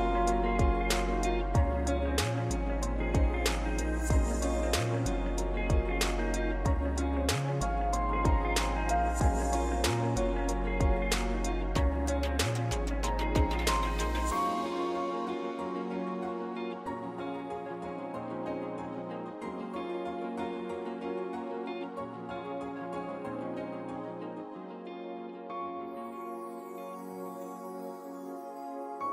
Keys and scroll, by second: 0.0-0.1 typing, 10.0 ctrl+s, 10.3 ctrl+s, 11.7 r.